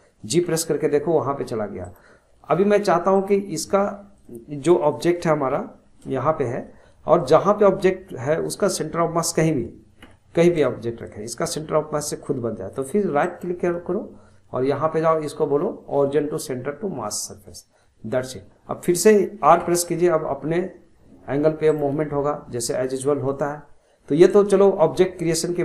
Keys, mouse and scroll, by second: 0.4 g, 3.1-4.1 right drag, 4.1 drag, 4.8 click, 5.5 g, 6.6-9.8 middle drag, 10.0 g, 13.2-19.6 right drag, 19.6 r.